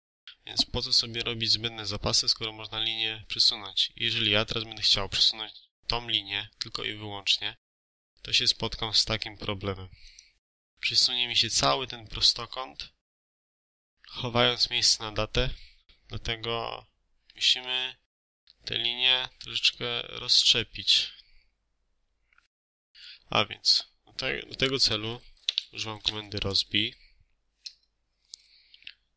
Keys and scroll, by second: 14.7 Escape, 25.7-26.4 typing, 27.7 Return.